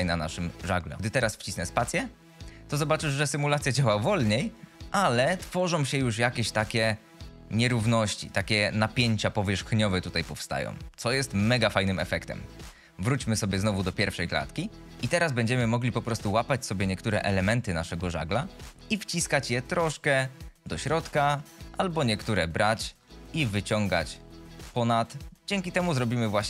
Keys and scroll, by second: 1.8 space, 11.8 space, 13.4 shift+Left, 14.9 Tab, 18.4 g, 24.0 g.